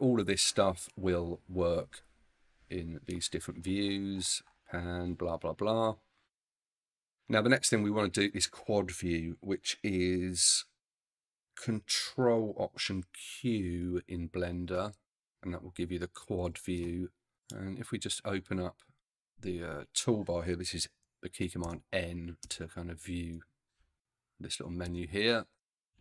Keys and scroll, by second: 13.7 ctrl+alt+q, 15.8 ctrl+alt+q, 21.6 n, 24.9 n, 25.8 n.